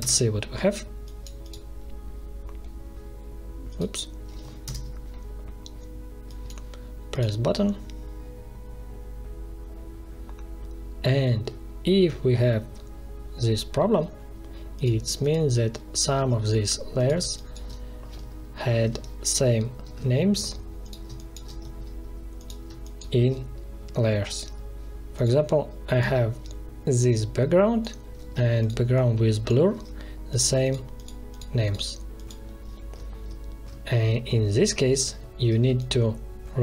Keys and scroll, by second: 4.6 ctrl+Return, 16.1 space, 18.7 alt+2, 19.8 alt+1, 21.0 space, 22.6 space, 28.1 ctrl+z, 29.6 ctrl+z, 35.6 space.